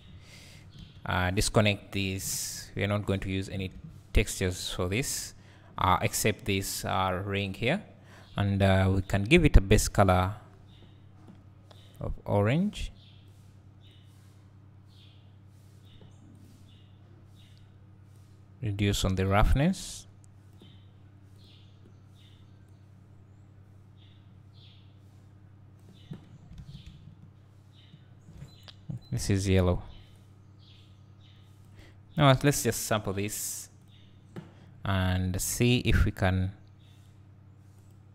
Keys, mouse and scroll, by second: 1.4 click, 2.5 Delete, 11.8 click, 18.3-22.7 drag, 26.3-26.6 scroll down 2, 26.6 alt+a, 27.0 `, 30.2 click.